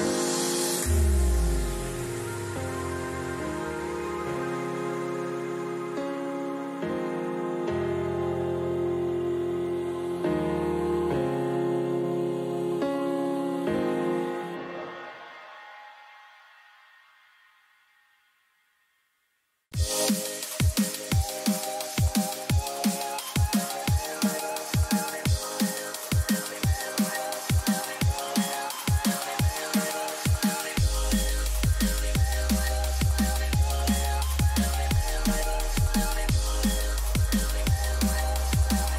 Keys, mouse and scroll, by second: 4.8 k, 38.6-38.9 middle drag.